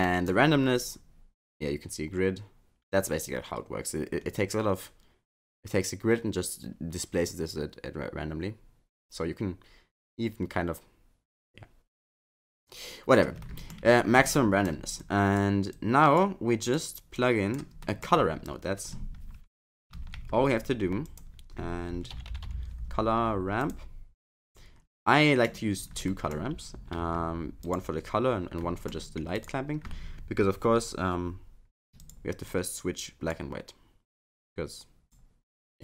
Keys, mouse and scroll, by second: 0.8 click, 13.4 middle click, 13.9-14.5 scroll down 6, 14.3 middle click, 15.0 click, 15.8 click, 16.7 click, 17.2 click, 17.8 middle click, 18.2 scroll up 5, 20.0 shift+a, 25.4 middle click, 26.1 middle click, 27.1 shift+d, 28.6 middle click, 29.4 click, 29.9 scroll up 5, 32.0 click, 32.5 click, 34.5 click.